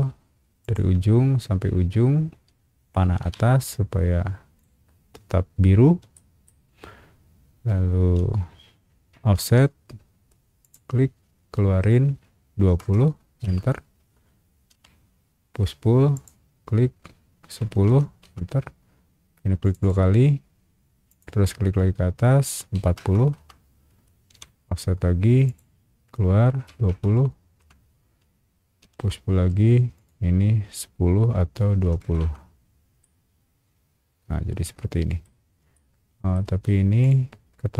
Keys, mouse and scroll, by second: 0.6 click, 3.2 Up, 4.5 click, 6.1 shift+middle click, 9.5 f, 10.6 click, 12.6 KP_2, 13.4 KP_Enter, 14.7 p, 16.1 click, 17.6 KP_1, 18.2 KP_Enter, 19.6 click, 19.8 click, 21.1 click, 22.7 KP_4, 22.9 KP_0, 23.3 KP_Enter, 24.3 f, 25.4 click, 26.7 KP_2, 27.6 KP_Enter, 28.8 p, 29.9 click, 31.8 KP_2, 32.2 KP_0, 32.2 KP_Enter, 33.0-35.2 middle drag, 35.4 scroll up 1, 35.7 middle click, 36.3 typing, 37.0 click.